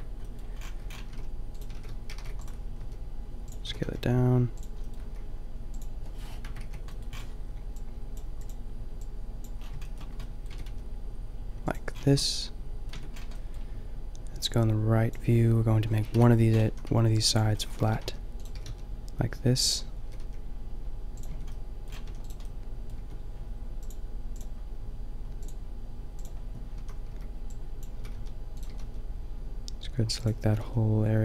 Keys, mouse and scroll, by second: 1.1 r, 1.7 r, 2.7 s, 3.6 s, 5.0 s, 6.5 KP_Decimal, 6.6 KP_5, 10.4 g, 13.0 Tab, 15.0 Tab, 16.1-18.6 typing, 20.0 g, 21.2 Tab, 21.9 click, 22.1 a, 22.5-23.0 middle drag, 23.0 Tab, 26.2 Tab, 26.8 a, 27.1 b, 27.9 s, 28.6 s, 30.4 g.